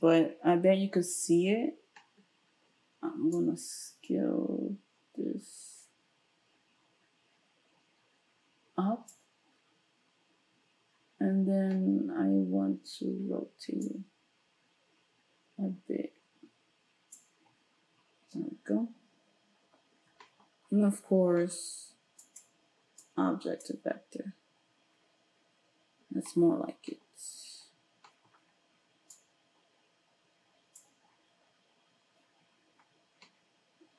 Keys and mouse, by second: 32.5-32.9 drag, 33.2-33.7 drag, 33.8-33.9 drag.